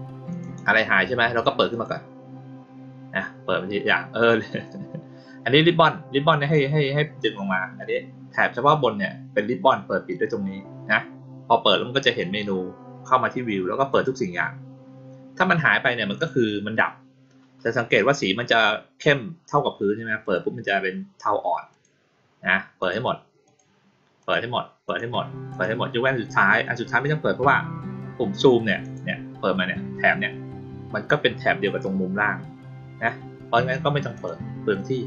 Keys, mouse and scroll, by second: 0.2 click, 1.7 click, 6.4 click, 13.8 click, 16.1 click, 20.2 click, 21.7 click, 22.7 click, 23.4 click, 24.1 click, 24.8 click, 25.5 click, 28.8 click, 34.1 click.